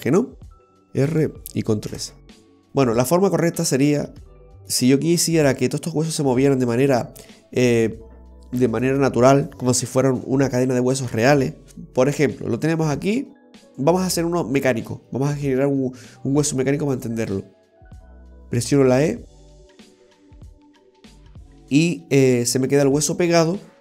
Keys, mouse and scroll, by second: 0.7 alt+r, 1.9 alt+s, 2.9 scroll up 1, 3.9 scroll down 1, 4.4 shift+middle click, 16.9 right click, 18.8 e, 23.2 right click.